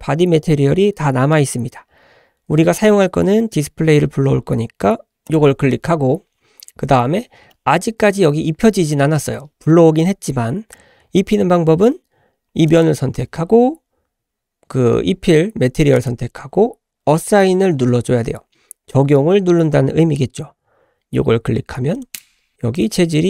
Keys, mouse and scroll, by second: 7.1 scroll up 2, 7.5 shift+middle click, 12.7 click, 16.0 click, 22.0 click, 22.7 click.